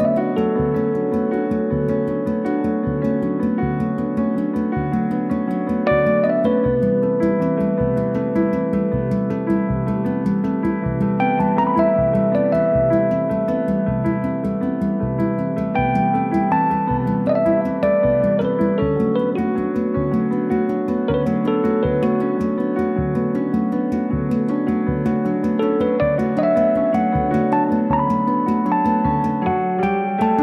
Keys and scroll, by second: 2.3 space, 8.1 Return, 14.2 space, 17.3 Right, 19.4 space, 22.5 m, 22.5 Right, 24.2 Delete.